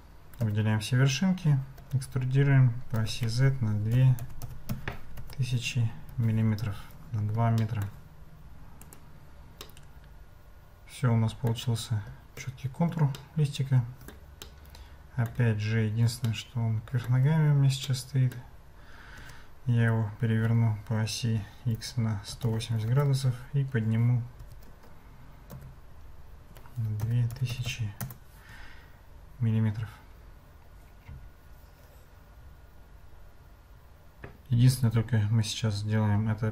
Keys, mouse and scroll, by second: 0.4 a, 1.8 e, 6.1 Tab, 7.6 shift+click, 7.8 shift+middle click, 7.8 shift+click, 9.0 click, 9.6-11.5 middle drag, 13.2-14.1 shift+middle drag, 14.4-15.4 middle drag, 16.3-17.1 shift+middle drag, 17.8 middle click, 19.2 r, 24.4 g, 26.9 g.